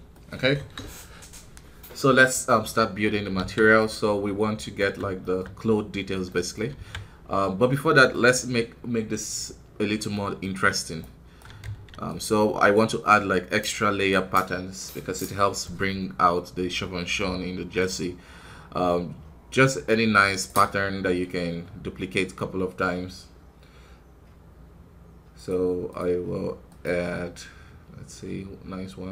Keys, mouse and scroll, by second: 0.1 middle click, 0.2 scroll up 1, 0.5 KP_1, 1.1 scroll down 2, 2.9 scroll down 3, 3.5 middle click, 3.7 scroll up 2, 4.3-4.7 scroll up 2, 4.7-7.3 middle drag, 7.3-9.2 scroll up 1, 9.3-10.9 scroll down 1, 10.9 right click, 11.5 shift+d, 12.7-29.1 drag.